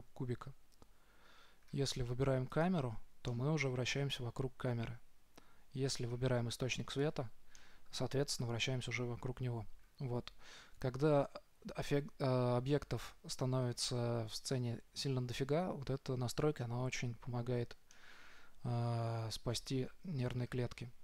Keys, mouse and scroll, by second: 2.9 right click, 3.6 middle drag, 3.8-4.1 middle drag, 4.1-4.5 right drag, 4.3-4.6 middle drag, 4.7 middle drag, 5.3 middle drag, 7.3-8.2 right drag, 7.9-9.8 middle drag, 8.5 right click, 18.3-20.2 middle drag.